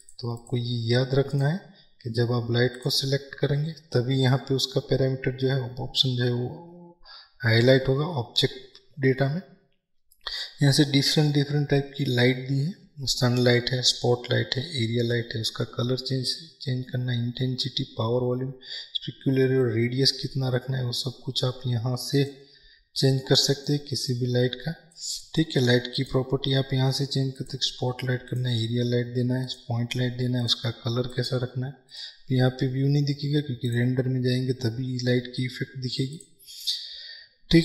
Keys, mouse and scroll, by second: 19.7-31.1 drag, 34.5 click, 36.4-37.6 drag.